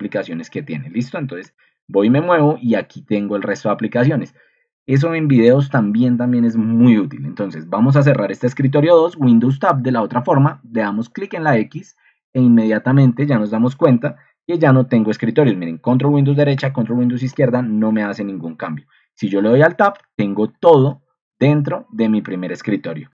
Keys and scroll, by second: 0.1 alt+Tab, 0.8 alt+Left, 1.3 ctrl+super+Right, 1.6 alt+Tab, 1.6 alt+Left, 1.6 ctrl+super+Right, 2.0 alt+Tab, 8.9 super+Tab, 12.5 Escape, 14.5 ctrl+super+Right, 16.0 ctrl+super+Right, 16.5 ctrl+super+Left, 18.5 alt+Tab, 19.9 alt+Down, 19.9 alt+Left, 20.4 alt+Right, 20.5 alt+Up, 20.8 alt+Left, 21.0 alt+Down, 21.2 alt+Right, 21.6 alt+Right, 21.9 alt+Left.